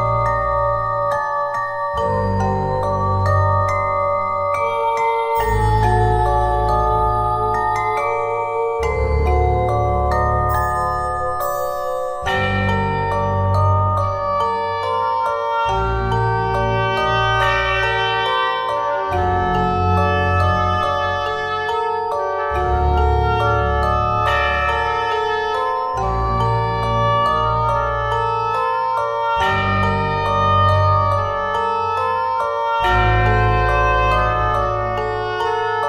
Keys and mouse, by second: 2.1 click, 3.0 KP_1, 3.8 Tab, 4.4 ctrl+Tab, 6.3 KP_1, 7.0 click, 8.2-9.2 drag, 12.5 z, 16.0 g, 23.9 e, 24.8 click, 27.7 e, 28.7 middle click, 31.4 e, 32.5-33.5 drag, 35.0-35.8 middle drag.